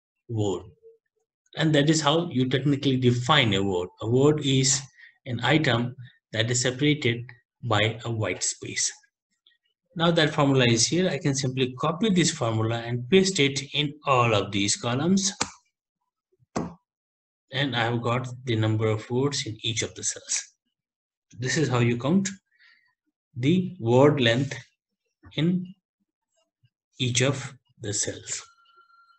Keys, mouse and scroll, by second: 0.4 Return, 10.0 Up, 11.2 ctrl+c, 12.0 Left, 12.8 ctrl+Down, 15.4 Return, 20.1 Return.